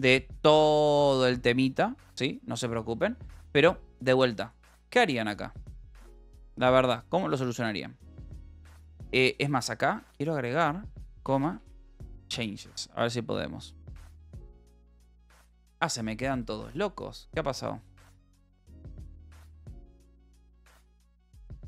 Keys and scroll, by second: 7.0 j, 7.6 h, 8.2 h, 8.8 l, 10.6-12.5 typing, 12.9 ctrl+s, 14.7 ctrl+s, 20.8 k.